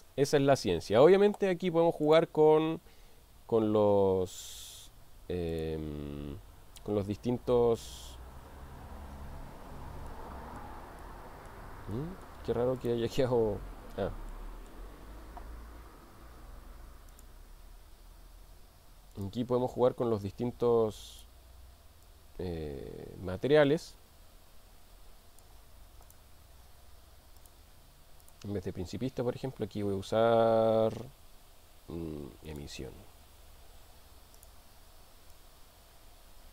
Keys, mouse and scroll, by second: 2.1 click, 5.5 click, 10.1-10.7 middle drag, 11.0-11.8 middle drag, 12.0-12.3 middle drag, 14.5-14.9 middle drag, 17.1 click, 19.2 click, 21.2 click, 26.0 click, 27.4 click, 28.2-32.6 drag, 34.4 click.